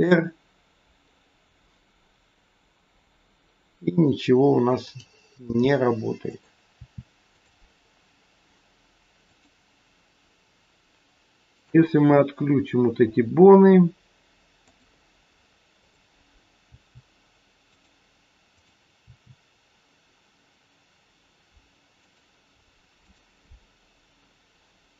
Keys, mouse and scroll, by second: 5.3 r, 6.7 r, 9.1 click, 11.5 click, 14.6 click, 15.7 click, 16.6 r, 18.5 click, 19.0 r, 23.0 click.